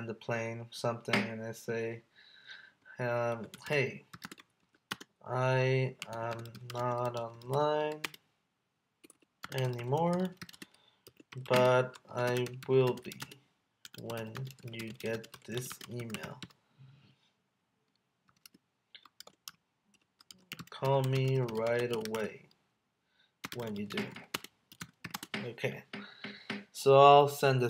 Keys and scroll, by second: 4.3 space, 4.9 space, 6.4 space, 8.0 space, 9.0 BackSpace, 9.1 BackSpace, 9.4 space, 10.5 space, 11.6 space, 12.3 space, 12.9 space, 13.2 space, 14.4 space, 14.8 space, 15.1 space, 15.7 space, 19.9 BackSpace, 20.8 space, 21.8 space, 23.6 space, 23.9 space, 24.3 space, 25.1 space.